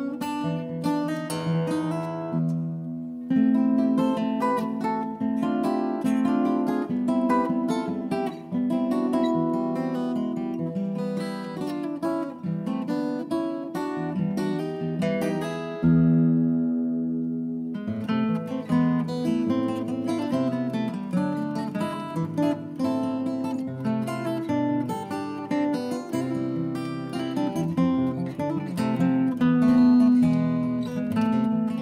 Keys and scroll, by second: 9.5-11.2 typing, 16.1-17.0 typing, 21.9-22.9 typing, 30.0-31.0 typing.